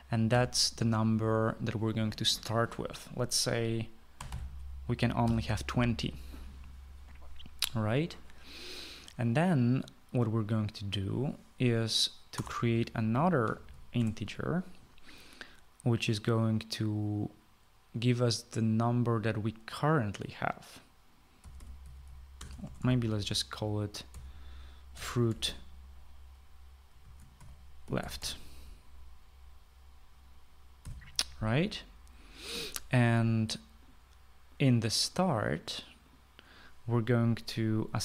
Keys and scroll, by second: 0.0-0.2 typing, 1.2 typing, 4.9-6.2 typing, 13.3 Return, 14.3-15.2 typing, 22.1-23.7 typing, 24.8-26.7 typing, 28.1-29.6 typing, 31.8 ;.